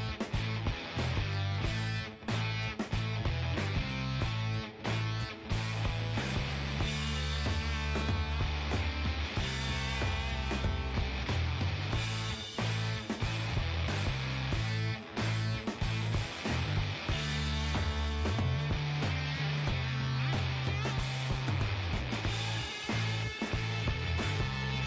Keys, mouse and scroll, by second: 1.0-2.9 right drag, 1.2 g, 4.1-9.4 middle drag, 6.5-12.2 right drag, 10.8-13.7 middle drag, 12.8 g, 15.2 middle click, 15.9 right click, 17.4 g, 20.4 g, 20.5-22.4 middle drag, 22.4-24.8 right drag, 23.1 g.